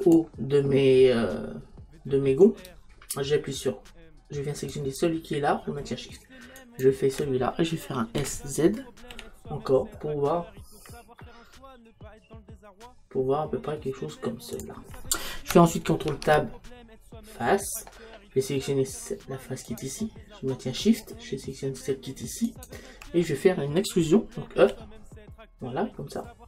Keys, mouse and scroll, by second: 0.2 click, 4.7-11.7 right drag, 8.2 s, 14.6-16.1 drag, 16.1 ctrl+Tab, 19.7-24.6 right drag, 24.6 e.